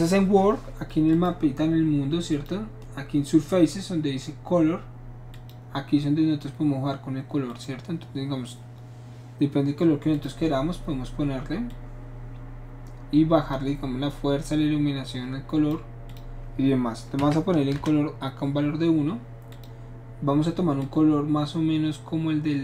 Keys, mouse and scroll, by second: 1.1 click, 2.3 click, 5.3 click, 7.5 click, 10.1 click, 11.7 click, 15.1 click, 16.1 click, 17.3 KP_1, 17.7 Return, 19.5 click, 20.8-22.6 drag.